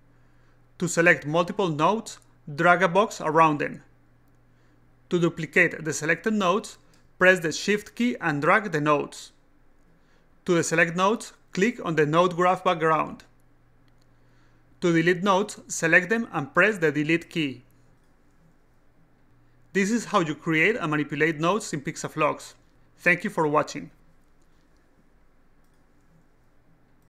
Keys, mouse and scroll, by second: 0.4 click, 2.1-3.4 drag, 9.2-10.6 shift+drag, 12.5 click, 17.3-18.6 drag, 21.5 click.